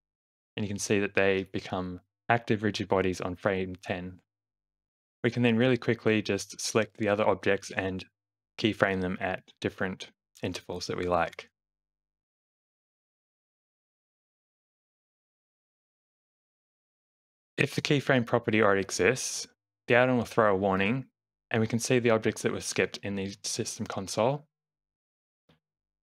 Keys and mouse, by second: 0.8 space, 1.3 shift+Left, 2.2 space, 3.3 space, 4.2 space, 4.7 space, 5.0 click, 6.5 click, 7.7 space, 8.3 space, 10.3 a, 12.0 shift+Left, 13.1 alt+a, 13.1 space, 17.2 space, 18.5-21.1 drag, 21.9-23.0 drag.